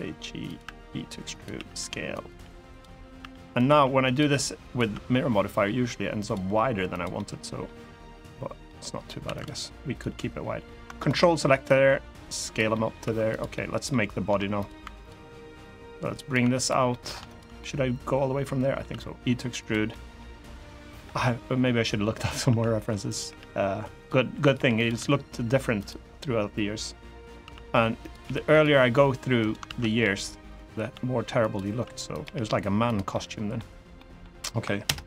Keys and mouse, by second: 0.0-3.9 typing, 0.2 click, 1.0 click, 1.8 click, 2.4 click, 3.3 click, 3.8 click, 4.3 click, 5.5 r, 5.9 click, 6.1 g, 6.6 click, 6.9 middle click, 8.4 middle click, 9.0 2, 9.1 click, 9.6 click, 10.7 ctrl+click, 11.5 click, 12.4 middle click, 13.3 middle click, 13.3 3, 14.3 click, 14.6 2, 14.7 click, 15.3 click, 16.2 3, 16.3 click, 16.6 middle click, 17.0 shift+click, 17.3-18.5 middle drag, 18.6 e, 19.3 click, 19.6 middle click, 20.7 KP_3, 21.5 r, 22.0 click, 22.2 s, 22.8 click, 23.0 g, 23.7 click, 24.3 g, 24.5 click, 24.7 e, 25.5 click, 27.2 s, 27.7 click, 28.0 g, 28.2 click, 28.5 e, 29.1 right click, 29.4 ctrl+z, 29.7 g, 30.2 click, 30.7 e, 31.1 click, 31.5 s, 31.8 click, 32.0 g, 32.6 click, 32.8 middle click, 33.7 middle click, 34.6 ctrl+KP_Add.